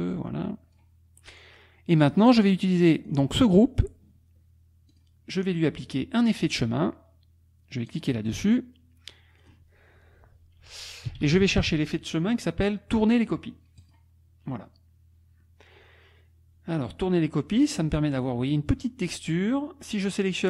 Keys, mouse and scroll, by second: 0.1 click, 1.9 click, 2.9 click, 4.9 click, 6.5 click, 7.9 click, 9.4 click, 10.9-11.9 typing, 13.8 click.